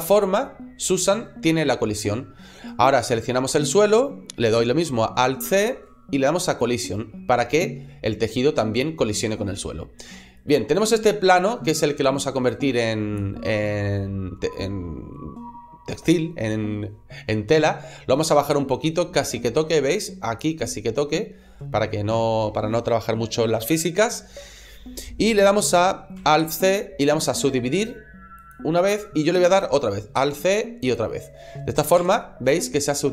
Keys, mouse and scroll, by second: 2.6 right click, 5.3 alt+c, 10.3 right click, 10.6 middle click, 12.4 click, 13.3 middle click, 18.0 click, 20.4 middle click, 26.2 alt+c, 30.0 alt+c, 31.9 Tab, 32.3 middle click.